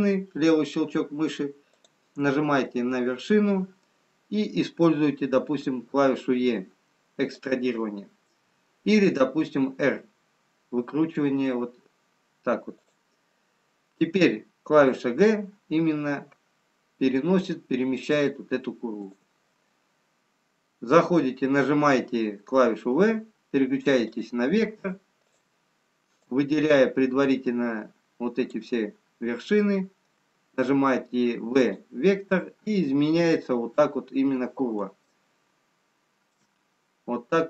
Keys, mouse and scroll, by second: 1.7 click, 5.7 e, 22.7 v, 25.2 click, 31.2 v, 32.6-33.0 scroll up 1, 33.6-34.5 scroll down 2, 35.0 shift+middle click, 37.0-37.4 scroll up 4.